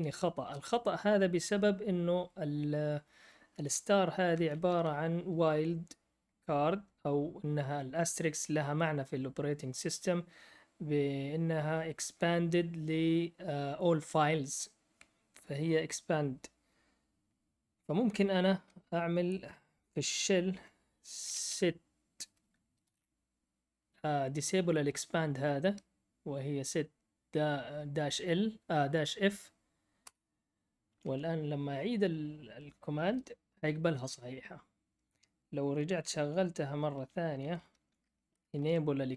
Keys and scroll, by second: 0.0 typing, 4.3 shift+Left, 4.5 shift+Left, 4.6 shift+Left, 18.6 Down, 20.5-23.3 typing, 30.0 Return, 33.0 Return, 33.0 Up, 37.3 Up, 37.3 Left, 37.4 Left, 37.8 Right, 38.3 BackSpace.